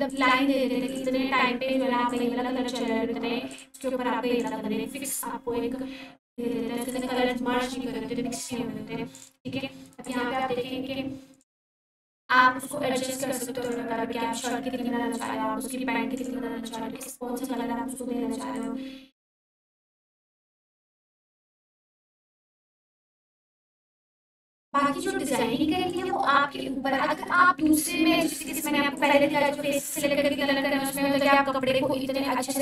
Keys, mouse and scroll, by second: 0.1-3.0 drag, 6.9-9.4 drag, 21.9-22.8 drag.